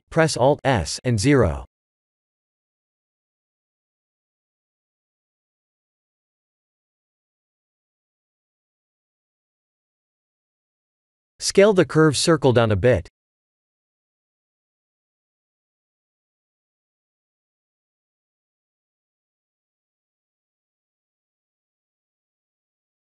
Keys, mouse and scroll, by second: 3.7 click, 4.1 middle click, 6.2-6.7 scroll down 4, 6.7 middle click, 8.9 scroll up 4, 9.5 Tab, 9.9 shift+middle click, 10.6 middle click, 11.7 click, 12.5 s, 20.5 click, 21.0 Tab, 21.8 click, 22.6 click.